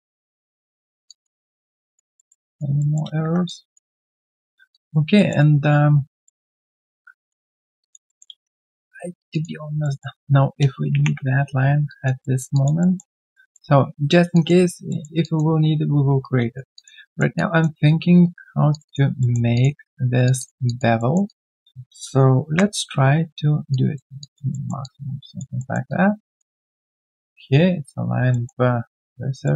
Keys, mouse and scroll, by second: 0.8 alt+right click, 1.0 alt+click, 1.4 alt+middle click, 1.7 alt+click, 2.1 alt+middle click, 2.4 alt+click, 2.8 alt+middle click, 3.4 alt+click, 4.4 alt+middle click, 4.7 alt+click, 5.1 alt+middle click, 5.5 alt+right click, 6.2 alt+middle click, 6.5 alt+scroll down 1, 6.8 alt+click, 7.5 alt+middle click, 7.8 alt+click, 8.0 alt+middle click, 8.3 typing, 8.4 right click, 9.3 double click, 9.8 alt+middle click, 10.9 ctrl+Delete, 11.8 alt+click, 12.2 alt+middle click, 12.5 alt+click, 12.8 alt+middle click, 14.3 alt+click, 14.9 alt+middle click, 16.2 right click, 16.7 alt+click, 17.0 alt+middle click, 17.3 alt+click, 17.9 right click, 19.2 alt+middle click, 19.5 alt+click, 20.2 shift+click, 20.3 shift+double click, 20.6 alt+double click, 20.9 alt+middle click, 21.2 alt+click, 22.4 ctrl+b, 24.2 alt+click, 24.5 alt+middle click, 24.8 alt+click, 25.6 alt+middle click, 25.8 alt+click, 28.3 alt+middle click, 29.4 alt+middle click.